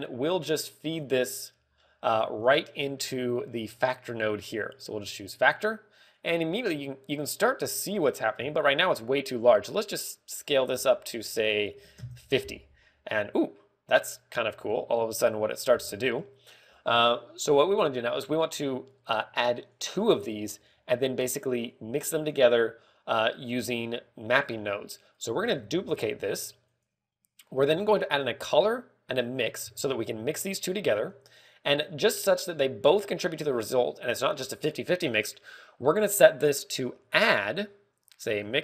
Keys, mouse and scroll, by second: 0.4 click, 0.7 middle click, 3.3 click, 3.6 scroll up 4, 3.9 middle click, 5.0 click, 7.1 click, 10.7 ctrl+click, 20.5 click, 21.5-22.1 scroll down 3, 21.8 middle click, 22.5 click, 26.1 click, 26.3 shift+d, 27.7 click, 28.6 shift+a, 30.5 g, 31.3 click, 32.0 click, 34.1 click, 34.1-34.8 scroll up 3, 34.4 middle click, 35.2 click, 36.0 middle click, 38.0 click.